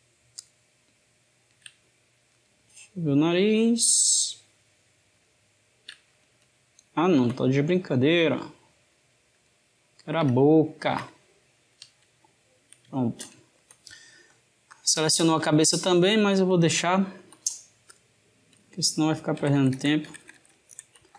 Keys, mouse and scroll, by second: 0.2 shift+click, 2.1 click, 4.9 shift+click, 5.9 click, 6.5-8.1 ctrl+middle drag, 8.1 shift+click, 9.2 shift+click, 10.4-14.5 ctrl+middle drag, 14.5-16.6 drag, 16.6-17.8 ctrl+middle drag, 17.8 click, 19.2 ctrl+KP_Add.